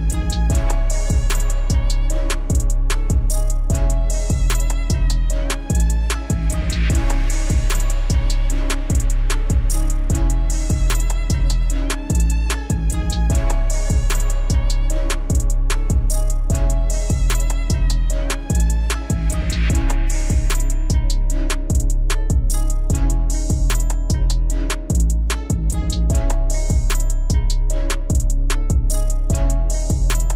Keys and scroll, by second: 18.0 ctrl+a.